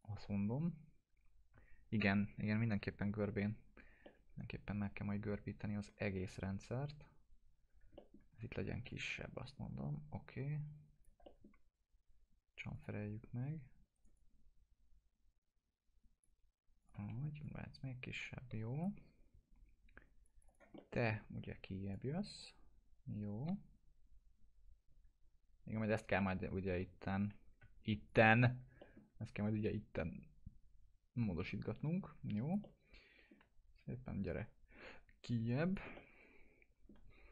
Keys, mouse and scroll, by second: 4.0-5.3 alt+middle drag, 8.3 typing, 8.9-11.1 drag, 11.3 alt+middle click, 12.8 click, 14.2-16.3 drag, 17.0 e, 17.4-19.0 drag, 20.8 alt+middle click, 21.1 w, 21.9-26.0 drag, 26.2-27.1 alt+middle drag, 28.1 ctrl+click, 28.8 alt+middle click, 29.7 click, 29.7-33.6 drag, 32.6-34.3 alt+middle drag, 34.3-35.9 drag, 36.0-36.9 alt+middle drag.